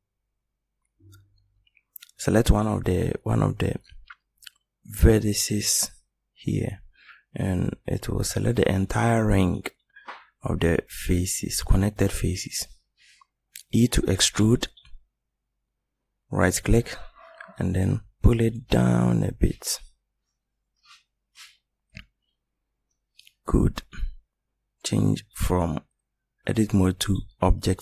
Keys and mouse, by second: 10.2 middle click, 13.8 e, 18.4-20.4 drag, 21.1 middle click, 25.5-27.6 middle drag.